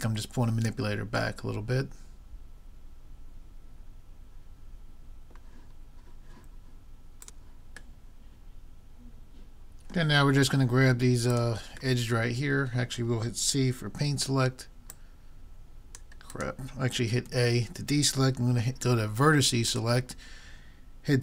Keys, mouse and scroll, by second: 1.4-3.1 middle drag, 8.1-10.2 middle drag, 11.4-13.1 drag, 12.0-14.0 middle drag, 12.0-13.1 right drag, 13.2 click, 13.2 right click, 13.7 click, 13.7 right click, 14.1 c, 14.2 click, 14.2 middle click, 14.2 right click, 17.3 a, 19.7-21.2 drag.